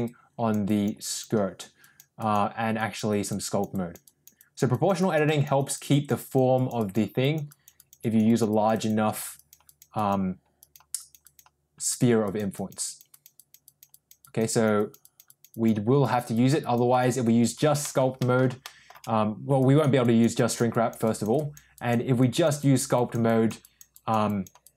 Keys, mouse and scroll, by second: 0.0 click, 0.6 click, 1.0 click, 1.7 click, 2.1 click, 2.7 click, 3.0 click, 3.4 click, 3.6 click, 4.0 click, 4.3 click, 4.7 click, 4.9 click, 5.2 click, 5.5 click, 5.8 click, 6.1 click, 6.5 click, 6.7 click, 7.1 click, 7.4 click, 7.7 click, 7.9 click, 8.2 click, 8.4 click, 9.3 click, 9.6 click, 9.9 click, 10.5 click, 10.9 click, 11.2 click, 12.1 click, 12.5 click, 12.8 click, 13.0 click, 13.3 click, 13.6 click, 13.8 click, 14.1 click, 14.4 click, 14.7 click, 14.9 click, 15.2 click, 15.4 click, 16.0 click, 16.3 click, 16.5 click, 16.8 click, 17.7 shift+middle click, 18.1 middle click, 18.6 shift+middle click, 19.5 click, 20.0 click, 20.3 click, 20.7 click, 21.0 click, 21.3 click, 21.7 click, 22.1 click, 22.5 click, 22.9 click, 23.2 click, 23.6 click, 23.9 click, 24.2 click, 24.6 click.